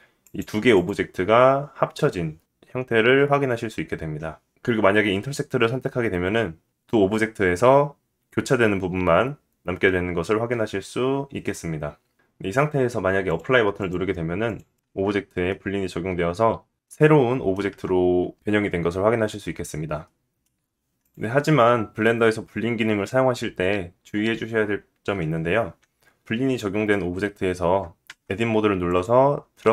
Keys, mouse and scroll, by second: 1.0 click, 1.1-4.1 middle drag, 6.0 click, 13.3-14.6 drag, 14.8 click, 15.0 Tab, 15.6 middle click, 16.7-17.1 scroll up 2, 17.3 middle click, 18.2 Tab, 18.8-20.7 middle drag, 20.7-24.7 drag, 27.6 Tab, 28.4 click.